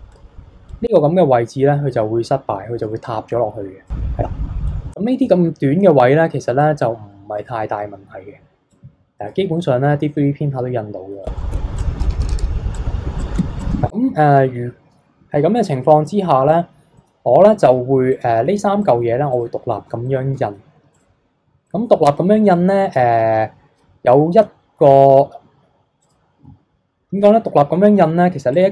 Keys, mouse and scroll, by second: 0.1-3.5 drag, 3.8-4.9 drag, 4.9-6.6 middle drag, 6.6-10.6 drag, 10.6-11.1 scroll down 2, 11.1 KP_3, 11.4 middle click, 11.5 KP_3, 11.8 click, 12.7 click, 13.3 scroll up 3, 13.4 scroll down 1, 13.6 click, 13.9 click, 15.8 alt+h, 16.4 click, 16.9-18.1 middle drag, 18.1 click, 18.8 click, 19.3 click, 20.0-20.9 shift+middle drag, 20.9 click, 21.6-22.9 middle drag, 22.9-25.4 scroll up 1, 25.4-25.9 scroll up 1, 26.0 click, 28.5 click.